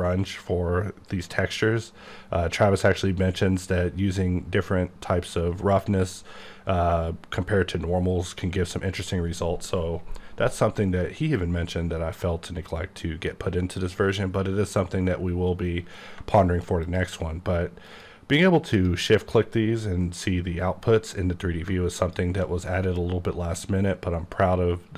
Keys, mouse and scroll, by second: 16.1 shift+click, 16.8 shift+click, 17.9 shift+click, 18.7 click, 22.0 shift+click.